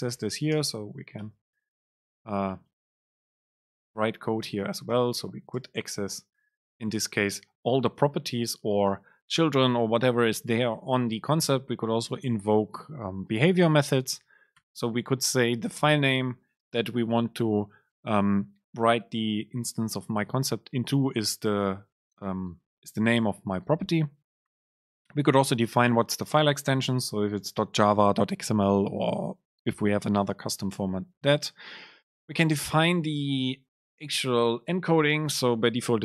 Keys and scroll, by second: 0.7 super+space, 2.7 BackSpace, 3.4 Return, 4.1 super+space, 33.3 Down.